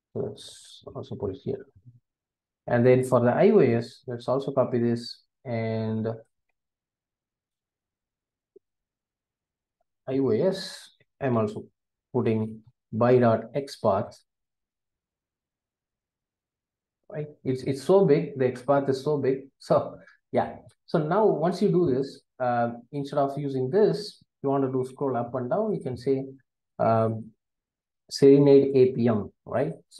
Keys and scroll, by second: 0.9 super+v, 4.2 super+c, 10.6 Return, 14.2 Return, 15.0 super+v.